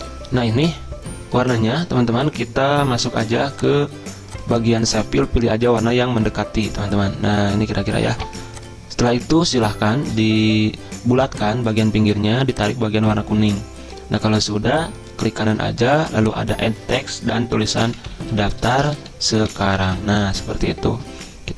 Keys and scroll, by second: 17.6-20.4 typing.